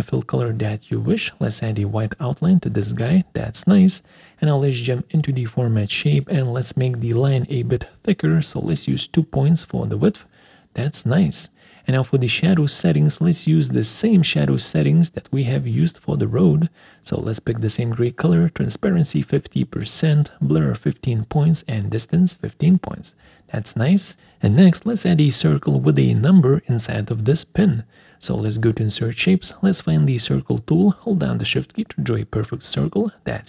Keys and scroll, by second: 3.4 alt+4, 32.7 alt+4.